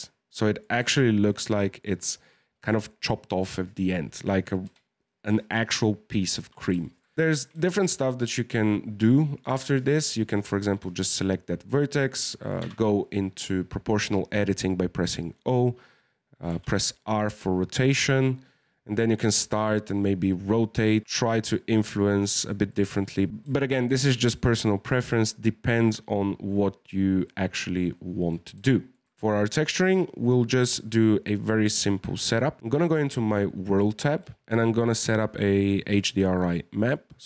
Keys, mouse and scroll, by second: 3.8-4.6 scroll down 1, 4.6 KP_1, 6.8-7.1 shift+middle drag, 7.1 Tab, 9.0 click, 9.4 click, 10.3 right click, 12.6 o, 16.5 r, 21.0-23.3 middle drag, 23.3 Tab, 23.5-26.6 shift+middle drag, 27.2-29.1 middle drag, 32.6 click, 34.4 click.